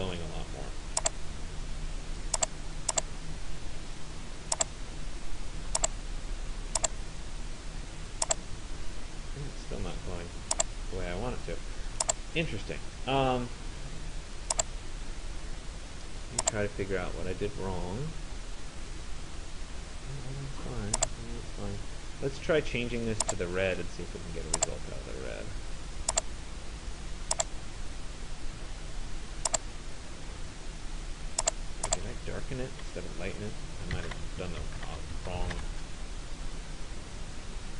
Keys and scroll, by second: 33.6-36.1 typing.